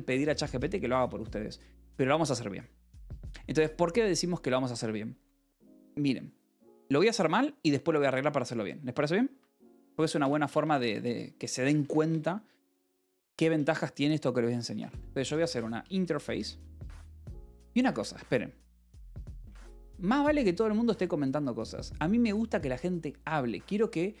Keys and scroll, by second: 9.2-12.4 typing, 14.3-18.0 typing, 17.8 Escape.